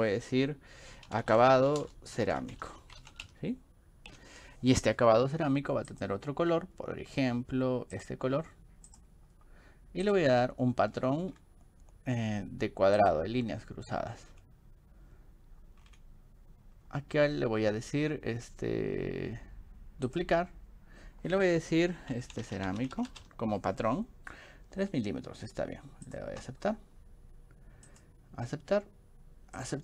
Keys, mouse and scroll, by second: 0.9-3.8 typing, 5.9 click, 8.0 click, 8.9 click, 10.1 click, 10.9 click, 13.0 click, 14.0 scroll up 2, 14.3 click, 15.8 scroll down 2, 20.1 click, 22.2-23.7 typing, 27.9 click, 29.6 click.